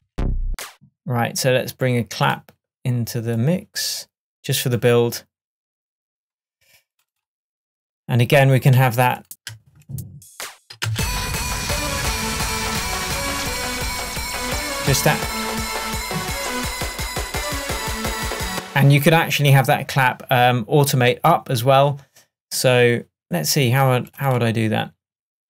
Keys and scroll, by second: 18.6 space.